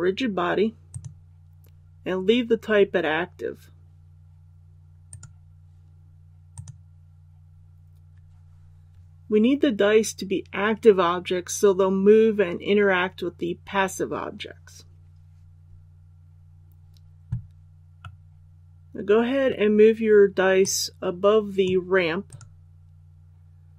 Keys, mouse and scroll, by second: 0.8 click, 5.0 right click, 6.5 click, 17.9-20.2 middle drag, 20.6-22.2 drag, 22.2 right click.